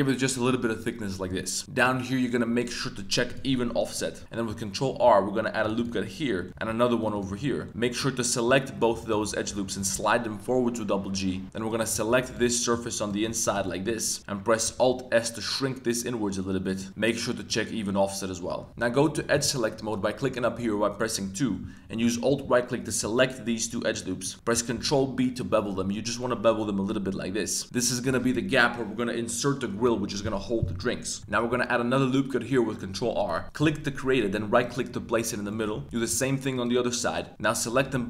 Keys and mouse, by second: 1.3 click, 3.2 click, 3.9 middle click, 4.2 super+r, 4.9 super+r, 5.8 click, 6.0 middle click, 6.6 super+r, 7.1 click, 7.3 middle click, 9.0 alt+shift+click, 9.3 middle click, 9.8 g, 9.9 g, 11.4 3, 11.7 click, 12.2 shift+super+click, 12.4 middle click, 13.0 shift+click, 13.4 shift+super+click, 13.6 middle click, 14.7 alt+s, 16.6 click, 17.4 click, 17.8 middle click, 18.7 a, 19.3 click, 19.7 2, 22.0 alt+click, 22.8 alt+shift+click, 23.7 middle click, 24.2 middle click, 24.7 super+b, 27.6 middle click, 31.2 super+z, 31.2 middle click, 31.5 super+r, 35.5 middle click, 35.9 super+r, 36.5 click, 37.3 g, 37.7 g, 37.9 g.